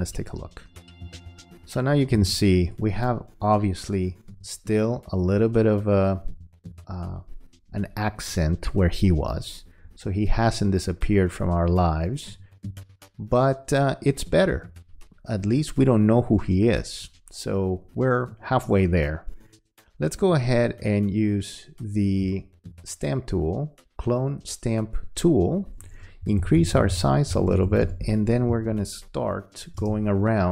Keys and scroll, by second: 2.1 m.